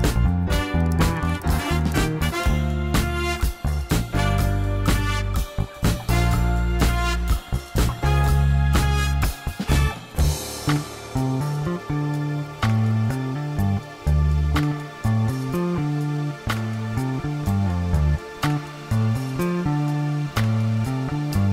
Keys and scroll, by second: 4.1 shift+z, 5.8 3, 7.9 Tab, 11.4 Tab, 13.0 ctrl+r, 18.1 ctrl+r.